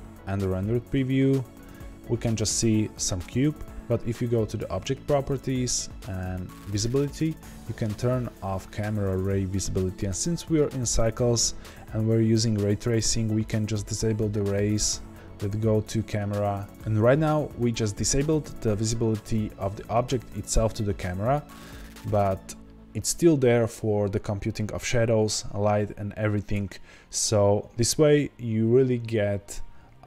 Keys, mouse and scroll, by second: 0.4-1.7 scroll down 2, 1.7-3.7 scroll down 1, 3.7-14.8 drag.